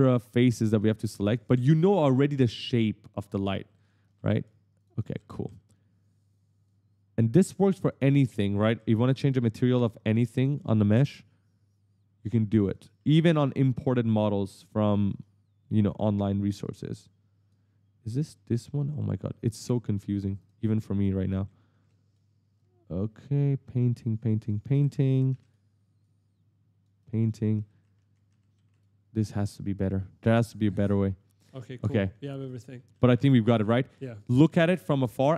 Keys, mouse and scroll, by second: 0.9 right click, 1.0 right click, 1.3 right click, 1.5 right click, 1.6 right click, 1.7 right click, 2.5 click, 3.1 right click, 3.5-5.6 typing, 3.5 right click, 3.9 right click, 4.2 right click, 4.6 click, 4.8 right click, 5.0 right click, 5.3 right click, 6.0 click, 7.9 right click, 8.6-10.5 typing, 9.0 click, 11.0 click, 12.6-15.3 typing, 12.7 right click, 13.2 right click, 14.3 right click, 14.7 right click, 15.7 click, 17.9 click, 18.2 click, 18.6 right click, 18.8-21.5 typing, 19.1 right click, 19.5 right click, 20.2 click, 20.4 right click, 20.8 right click, 21.3 right click, 21.6 right click, 22.4 click, 24.2-25.6 typing, 24.4 right click, 25.0 right click, 25.2 right click, 25.8 click, 26.8 right click, 26.9 right click, 27.1 right click, 27.5 right click, 27.7 right click, 27.8 right click, 28.1 right click, 28.3 right click, 28.4 right click, 28.5 right click, 28.5 right click, 29.4 click, 30.6 right click, 31.1 right click, 31.5 right click, 31.7 right click, 31.8 right click, 31.8 right click, 31.9 right click, 32.0-34.3 typing, 32.0 right click, 32.8 right click, 33.1 right click, 33.3 right click, 34.7 right click.